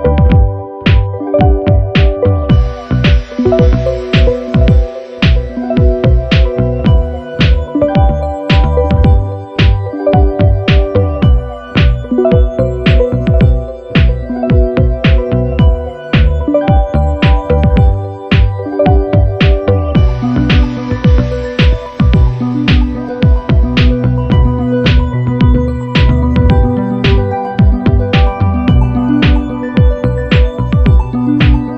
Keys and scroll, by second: 10.8 super+-, 11.9 i, 25.4 super+=.